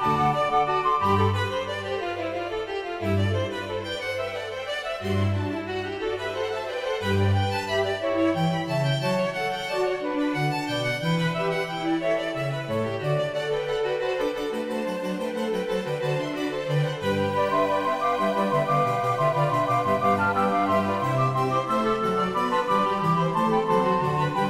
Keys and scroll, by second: 9.9 Escape, 12.5 e, 21.7 g.